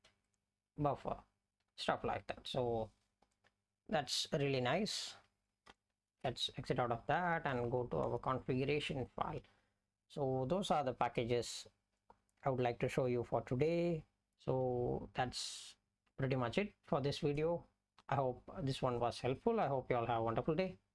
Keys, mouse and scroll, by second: 5.7 ctrl+., 6.7 Down, 7.2 Down, 7.4 Down, 7.5 Down, 7.7 Down, 8.1 Return, 14.3 Down, 14.7-16.2 Up.